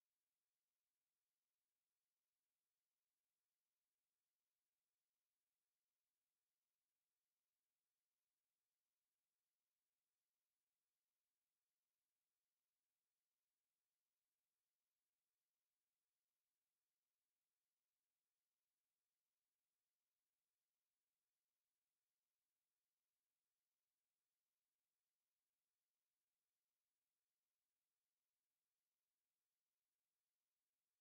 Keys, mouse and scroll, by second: 2.1 click, 3.0 click, 3.7 click, 5.7 click, 9.8 click, 12.0 click, 13.5 click, 14.1 right click, 15.0 click, 19.0 click, 21.1 click, 22.5 click, 24.0 click, 25.8-28.0 drag, 28.6-31.0 drag.